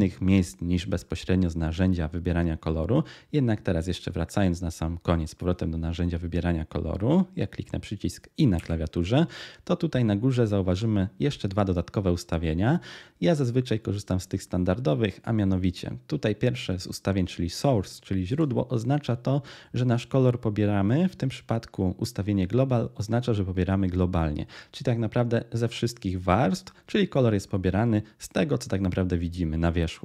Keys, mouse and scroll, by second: 8.4 i.